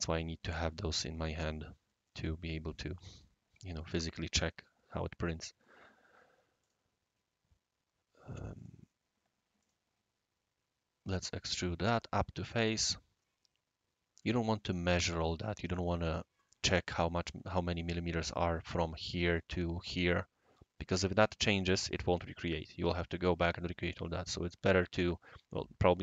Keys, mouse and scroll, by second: 6.6 click, 8.5 click, 9.6 click, 11.5 click, 12.1-14.2 right drag, 15.7-16.5 right drag, 19.0 right click.